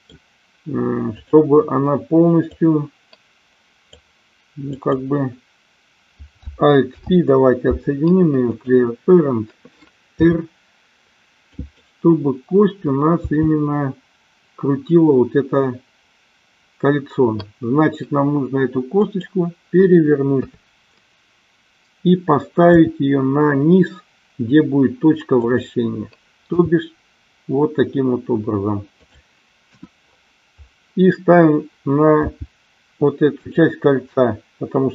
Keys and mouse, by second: 1.1 click, 2.5-3.8 drag, 6.8 alt+p, 10.2 r, 11.5 click, 13.2 g, 19.0 click, 20.3 KP_3, 22.7 r, 25.3 click, 26.5 g, 29.0 click, 29.6 KP_1, 32.1 g, 33.3 click.